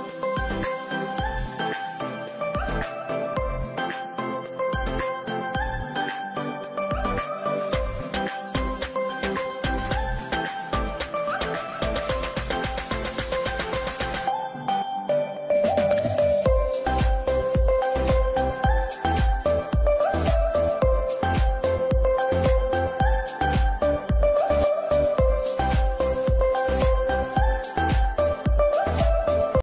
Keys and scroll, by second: 4.1 space, 11.0 space, 14.5 ctrl+g, 15.1 c, 15.5 F3, 15.9 Escape, 18.3 shift+Page_Up, 19.1 Escape, 19.6 F3, 21.0 F2, 23.2 Escape, 23.5 F3, 26.3 shift+F2, 27.3 F9.